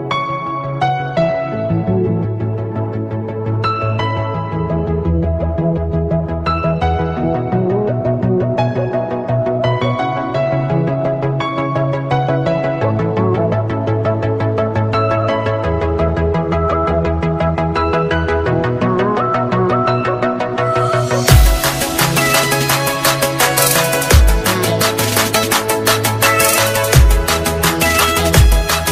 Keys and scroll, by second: 1.7 ctrl+space.